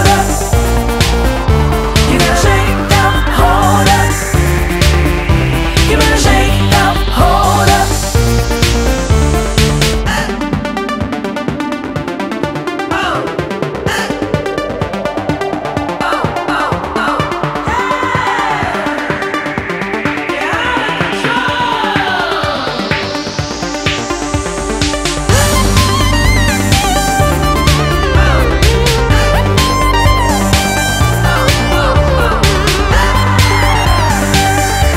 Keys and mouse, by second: 2.0 click, 4.9 click, 7.4 click, 10.1 ctrl+d, 10.7 click, 11.6 click, 14.3 click, 22.0 click, 25.5 click, 29.0 click, 30.9 click, 33.1 click.